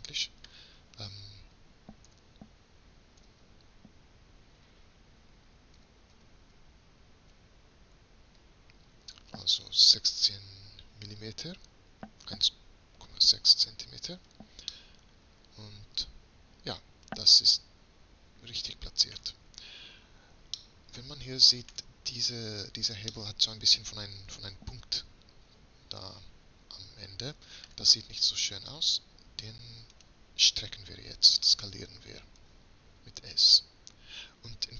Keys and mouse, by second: 2.2 g, 14.8 middle click, 16.9-18.0 middle drag, 18.8 middle click, 20.7 middle click, 22.7 middle click, 23.4 middle click, 23.6 middle click, 23.8 middle click, 24.0 middle click, 24.4 middle click, 26.8-27.8 middle drag, 27.9-30.0 middle drag, 30.0-31.8 right drag, 32.5 s.